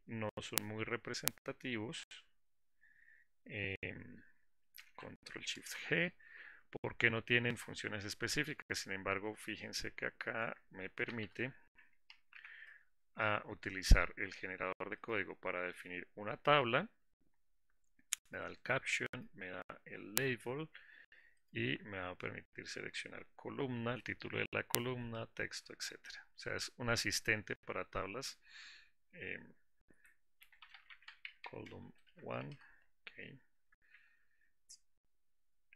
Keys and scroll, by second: 6.0 alt+Insert, 12.8 alt+Insert.